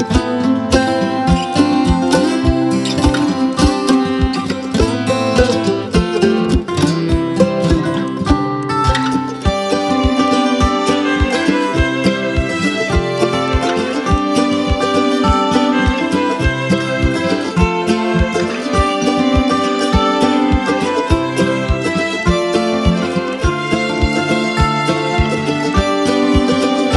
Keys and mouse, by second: 0.8 space, 1.0 click, 1.5-2.4 space, 1.7 click, 1.9 space, 3.2-7.1 drag, 9.0 space, 9.2-9.8 click, 9.5 space, 10.0-10.6 drag, 14.0 space, 14.2-14.8 click, 14.5 space, 15.0-17.1 click, 16.2 space, 16.4 click, 16.7 space, 17.2-19.4 drag, 18.7 space, 22.8 space, 23.0 click, 23.3-23.6 space, 23.6 click, 24.5 space, 24.6-25.3 click, 25.3 space, 25.4-26.9 drag.